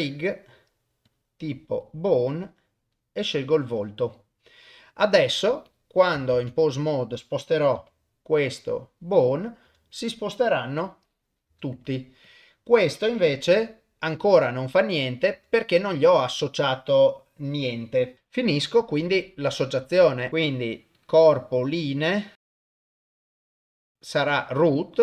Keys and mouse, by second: 1.1-1.9 drag, 2.4-3.8 drag, 5.7 click, 6.3 ctrl+Tab, 6.7 click, 7.8 g, 10.8 r, 12.3 click, 13.4 r, 20.3 ctrl+Tab, 20.3 click, 21.0 click, 22.4 click, 23.2 drag, 23.5 middle click, 23.7 click.